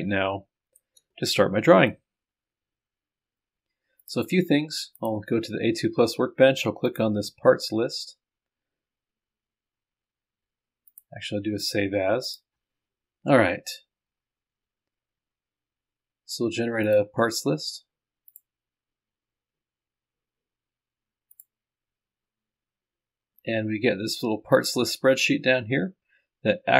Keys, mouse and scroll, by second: 4.0 click, 5.0 click, 12.8-13.6 scroll up 2, 16.8 click, 18.3 click, 21.3 click, 24.6 click.